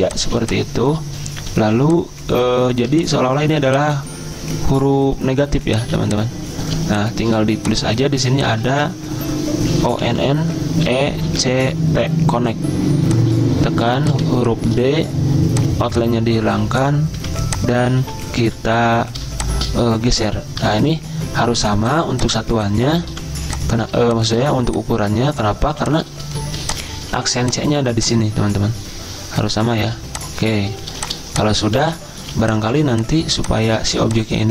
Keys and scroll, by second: 0.1-1.6 typing, 5.8 z, 6.8 space, 7.3 v, 8.2 t, 8.7 ctrl+a, 9.6-12.1 typing, 13.1-13.8 typing, 16.4-19.7 typing, 21.3-23.9 typing, 26.5 z, 27.1 v, 30.9-32.2 typing, 33.9 v.